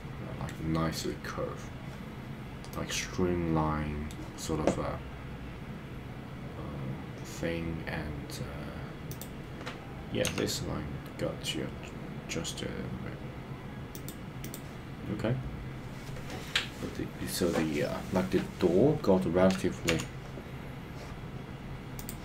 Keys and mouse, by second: 2.7-4.1 middle drag, 10.2 g, 13.9 click, 20.0 KP_3.